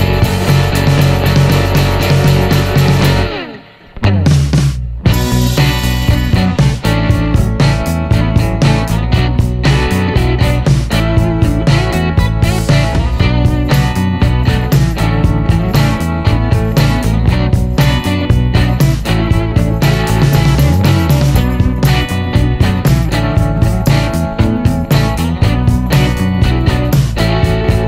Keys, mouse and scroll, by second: 0.9 shift+p, 2.2 click, 3.7 t, 7.2 click, 8.8-11.6 drag, 11.7 middle click, 12.1 scroll up 1, 12.4-13.4 middle drag, 14.0 click, 15.4 click, 16.7 click, 17.7 click, 18.4 click, 19.7 middle click, 20.4 click, 21.8 t, 22.9 click, 24.8 c, 26.0-27.2 middle drag.